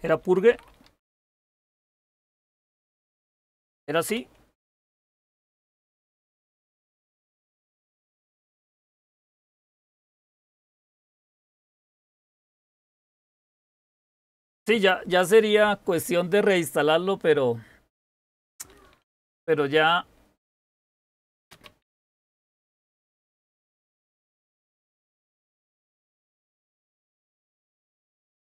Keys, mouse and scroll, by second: 0.0-3.6 typing, 3.9 Return, 20.6-22.3 typing, 25.0-28.5 typing.